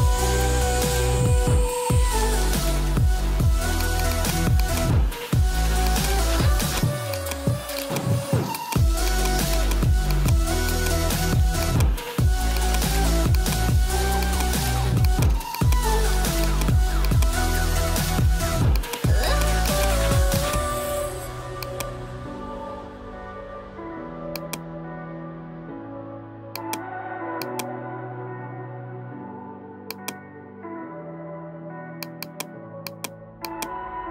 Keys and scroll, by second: 4.4 space, 18.5 space, 25.6 space, 31.5 space.